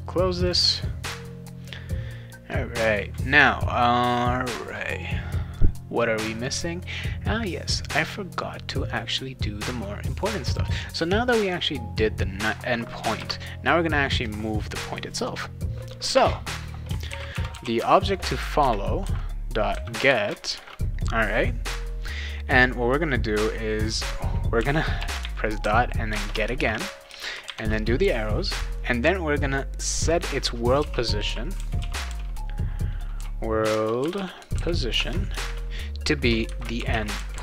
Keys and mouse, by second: 0.5 click, 6.4 click, 10.1 click, 10.5 click, 13.0 Return, 13.2 Return, 16.8-21.0 typing, 18.6 Return, 20.0 Return, 24.5-27.4 typing, 26.1 Return, 30.5-37.4 typing.